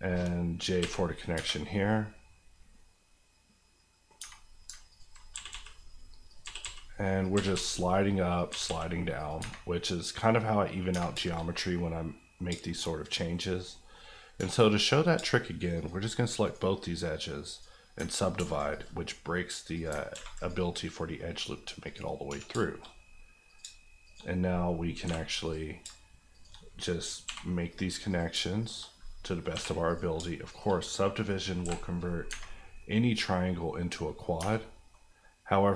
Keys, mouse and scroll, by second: 0.8 j, 1.3 Tab, 1.7 middle click, 4.2 Tab, 4.9 alt+click, 5.3-8.6 typing, 6.3 click, 7.2 click, 8.3 click, 9.1 click, 9.4 Tab, 9.7 middle click, 10.9 Tab, 11.2 shift+middle click, 11.8 middle click, 12.3 middle click, 12.4 shift+middle click, 12.8-13.1 shift+scroll down 2, 13.1 middle click, 13.9 scroll up 1, 14.4 2, 14.7 click, 15.1 shift+click, 16.1 click, 16.4 right click, 17.5 click, 18.0 ctrl+click, 18.3 ctrl+r, 18.7 click, 19.9 ctrl+click, 20.1 ctrl+r, 20.4 click, 22.3 1, 22.6 shift+middle click, 22.8 middle click, 22.9-23.4 scroll up 1, 23.4 click, 23.6 shift+click, 24.2 click, 25.0 j, 25.4 click, 25.9 shift+click, 26.6 click, 27.2 j, 28.1 click, 28.3 shift+click, 28.9 click, 29.5 j, 29.8 click, 30.1 shift+click, 30.8 click, 31.6 j, 32.2-32.8 scroll down 2, 32.8 middle click, 34.2 scroll, 34.4 Tab, 34.6 middle click, 34.9 scroll up 1.